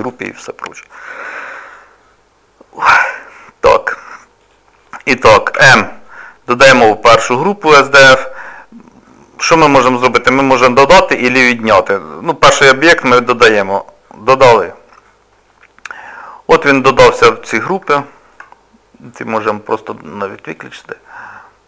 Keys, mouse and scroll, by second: 4.4 click, 5.6 m, 15.5 middle click, 18.0 shift+middle click, 19.4 click, 19.8 click.